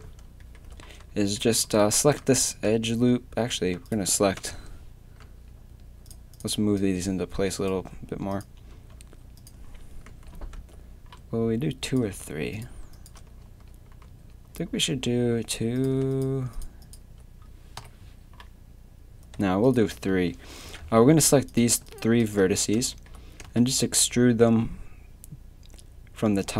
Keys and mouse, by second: 1.7 a, 4.4 KP_7, 5.2 z, 8.7 a, 10.1 z, 13.4 z, 14.0 z, 14.8 z, 17.8 KP_3, 20.7 KP_7, 23.4 e.